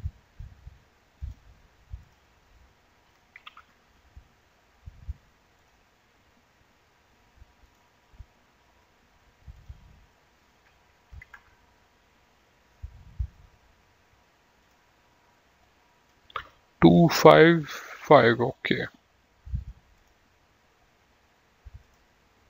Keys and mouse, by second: 1.3 click, 3.6 KP_2, 3.8 Return, 5.7 click, 7.8 click, 9.8 click, 11.4 KP_6, 11.6 KP_Enter, 14.8 click, 17.6 click, 20.2 click, 22.1 click.